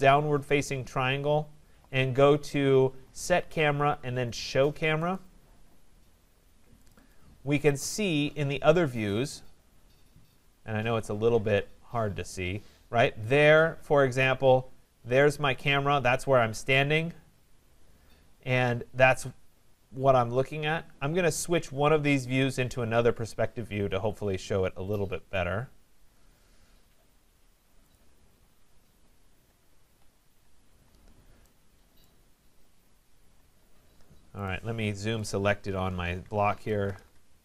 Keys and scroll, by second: 36.6 Return.